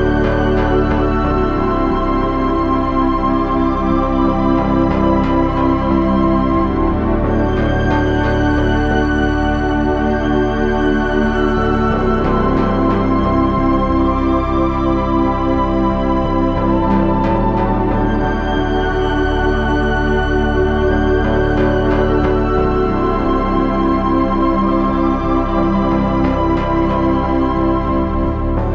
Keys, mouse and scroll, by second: 0.4 g, 18.9 ctrl+Tab, 20.0 z, 21.3 z, 22.8 z.